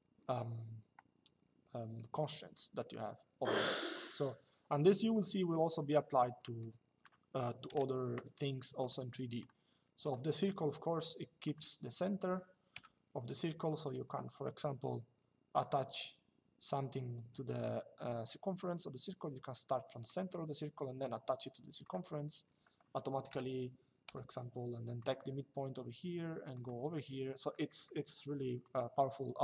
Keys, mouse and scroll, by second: 5.9 Escape, 6.3 click, 7.4 Delete, 8.5 click, 10.0 Escape, 11.2 click, 11.6 Escape, 19.8 click, 21.5 click, 22.2 Escape, 24.7 click, 26.2 click, 26.7 Escape, 27.4 middle click.